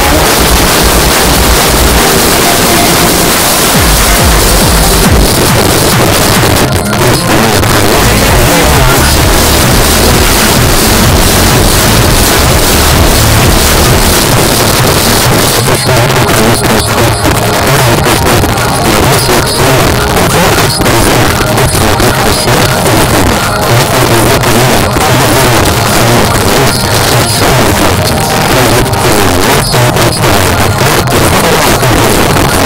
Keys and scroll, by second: 5.3 Page_Down, 14.2 Page_Down.